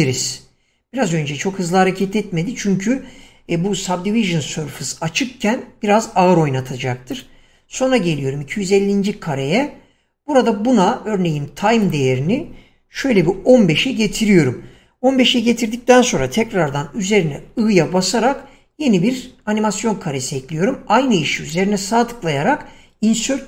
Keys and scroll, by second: 13.4 typing, 14.0 Return, 17.9 i, 20.6 typing.